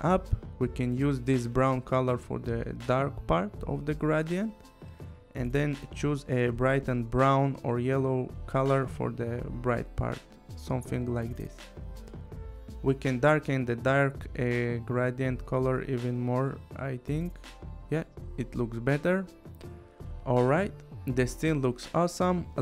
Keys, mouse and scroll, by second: 1.0 click, 3.0 click, 4.1 click, 5.2 click, 9.7 click, 10.9 click, 13.5 click, 16.1 click, 18.5 click, 21.8 click.